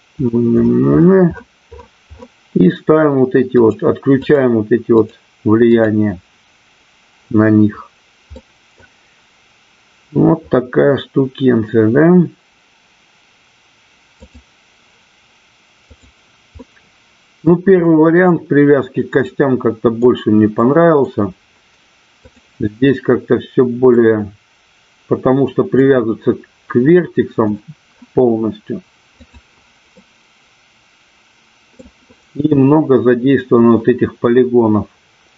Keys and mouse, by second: 3.6 click, 5.0 click, 5.7 click, 8.3 middle click, 14.1 click, 16.6 middle click, 19.2 middle click, 20.7 middle click, 22.2 click, 24.7-26.8 middle drag, 29.5 click, 30.3-32.2 middle drag.